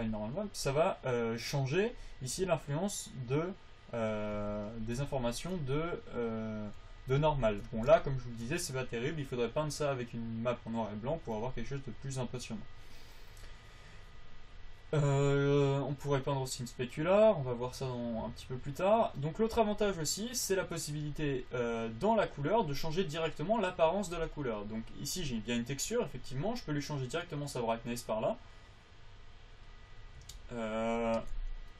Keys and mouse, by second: 7.7 click, 9.8-14.3 drag, 18.8-28.3 drag.